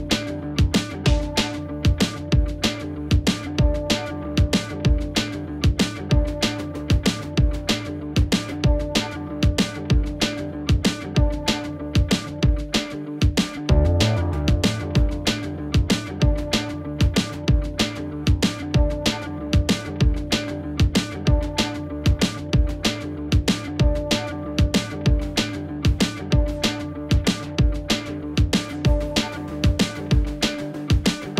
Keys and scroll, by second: 16.0 Delete, 30.6 ctrl+x.